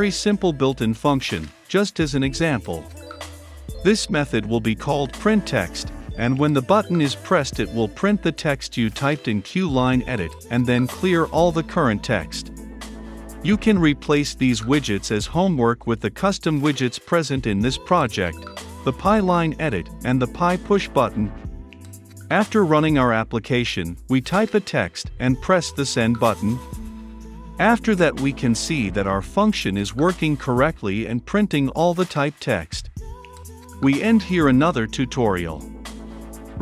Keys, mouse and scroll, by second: 0.2 Return, 0.6 click, 0.8 Return, 1.1-3.0 typing, 1.7 Return, 3.2 Right, 3.5 Return, 5.2-8.0 typing, 6.0 Return, 6.6 Return, 7.7 Return, 8.5 click, 8.7 Return, 9.2 click, 9.6-13.3 typing, 13.4 Return, 13.7 click, 14.4 Return, 14.9-18.2 typing, 15.2 Return, 15.7 Return, 16.4 Return, 17.8 Return, 18.3 Right, 18.8 ctrl+F5, 20.8-27.0 drag, 27.0 t, 27.0 e, 27.2 t, 27.3 e, 30.1-31.2 drag, 31.6 shift+h, 31.8 e, 32.3 o, 33.0-36.1 drag.